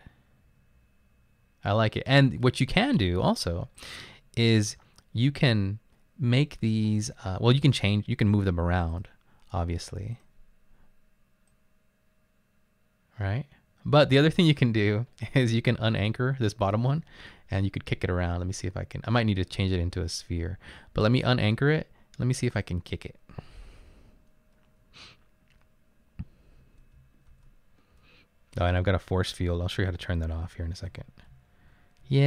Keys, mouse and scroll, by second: 15.4 click, 16.1 click, 26.7 Right, 27.1 Up, 27.3 Right, 28.7 Up, 29.1 Left, 29.8 Right, 30.5 Up, 31.3 Down.